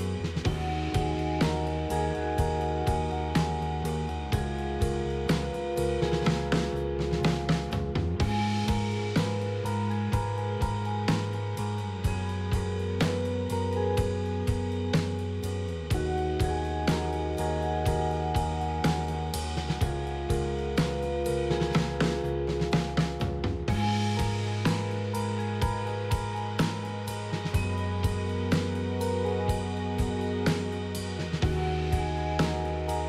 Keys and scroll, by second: 7.0-7.7 typing, 27.5-28.1 typing.